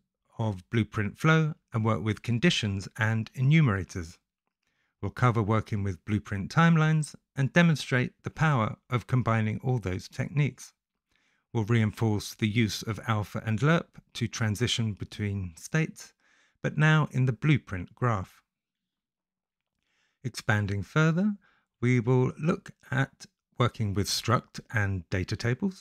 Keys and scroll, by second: 0.4 Return, 0.9 h, 1.2 i, 2.2 e, 2.6 t, 4.4 shift+s, 5.1 Return, 8.2 Return, 9.1-9.9 typing, 10.7 ctrl+z, 11.2 0, 11.8 c, 13.5 h, 14.2 space, 21.5-22.8 typing, 22.5 Return, 24.8-25.8 typing.